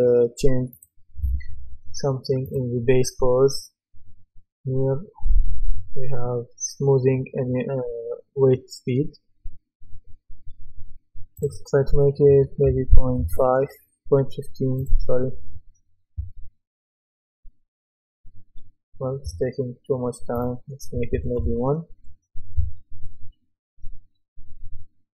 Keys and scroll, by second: 12.3 KP_0, 12.6 KP_Decimal, 12.9 KP_1, 13.6 Return, 21.1 KP_1, 21.4 Return.